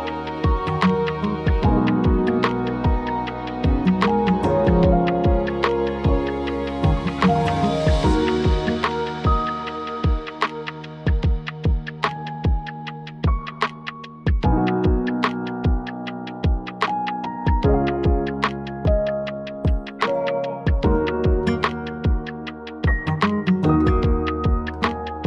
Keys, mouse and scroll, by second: 2.2 click, 3.6 click, 5.1 d, 5.8-7.4 drag, 5.8 d, 6.4 d, 7.9-9.8 drag, 8.1 d, 8.7 d, 9.2 d, 10.4 d, 10.9 d, 11.5 d, 12.0 d, 13.7 click, 13.9 d, 14.5 click, 14.6 d, 15.7 click, 16.5 d, 17.6 click, 18.4-19.3 scroll down 3, 19.3-20.6 scroll up 6, 21.3 click, 23.2 click, 24.9 click.